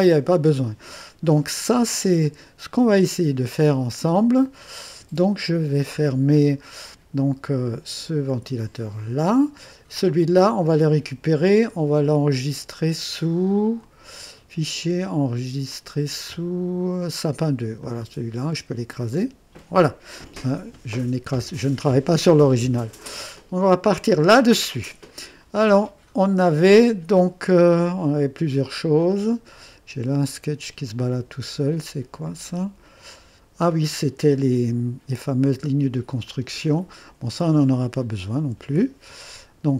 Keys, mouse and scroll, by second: 2.8 click, 9.0 click, 13.8 click, 15.7 click, 17.8 click, 19.1 click, 23.9 click, 29.0 click, 32.2 click, 34.4 typing, 35.7 typing, 36.2 click, 38.3 Delete.